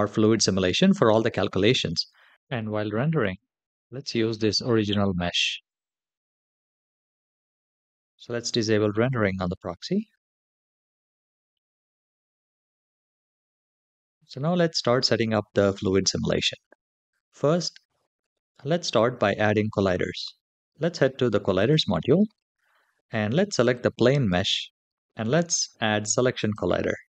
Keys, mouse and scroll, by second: 3.0 space, 8.8 click, 12.8 click, 13.3 /, 14.0 click, 21.2 click, 23.3 click, 26.0 click.